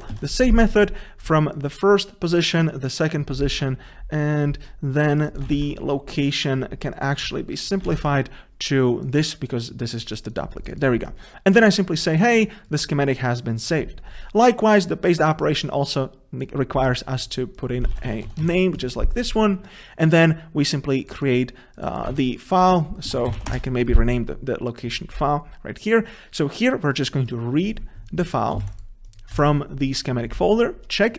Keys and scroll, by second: 0.3 ctrl+c, 5.7 ctrl+c, 8.1 ctrl+v, 22.4 shift+F6.